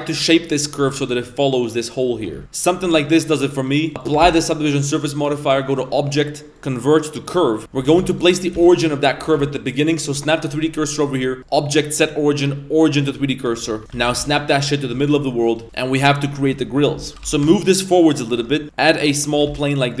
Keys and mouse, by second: 0.1 g, 0.8 Tab, 2.1 Tab, 2.3 g, 2.4 Tab, 2.4 a, 3.2 right click, 3.6 right click, 4.0 click, 4.2 ctrl+a, 5.7-7.3 drag, 7.7 Tab, 7.9 1, 8.1 right click, 8.5 shift+s, 9.2 Tab, 11.4-13.0 drag, 13.7 Tab, 13.9 shift+s, 14.3 shift+s, 14.7 middle click, 15.0 shift+middle drag, 15.6 z, 15.6 a, 15.6 b, 16.7 middle click, 17.1 g, 18.6 shift+a, 19.0 middle click, 19.3 Tab, 19.4 s.